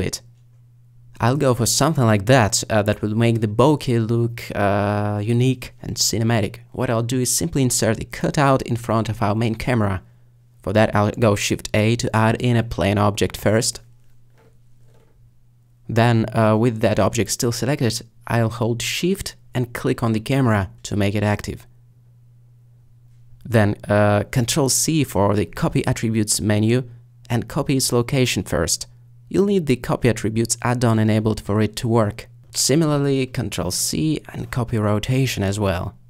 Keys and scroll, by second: 10.1 a, 25.3 ctrl+c, 32.9 ctrl+c.